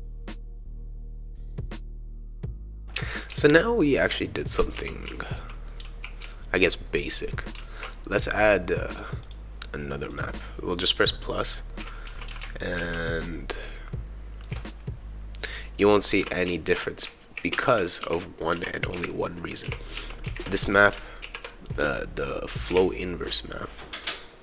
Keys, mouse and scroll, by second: 0.0-1.1 typing, 1.4 click, 1.6 click, 1.8 click, 2.0 click, 2.7-7.7 right drag, 2.7 s, 3.3 shift+e, 4.7 shift+w, 5.0 shift+d, 5.8 shift+w, 6.2 shift+e, 7.5 shift+s, 9.2 click, 10.1 click, 11.3-14.5 right drag, 11.8-13.2 typing, 15.5 click, 15.7-21.2 typing, 15.8-17.5 right drag, 20.1 shift+right click, 20.8 right click, 22.0-23.2 right drag, 22.7 q.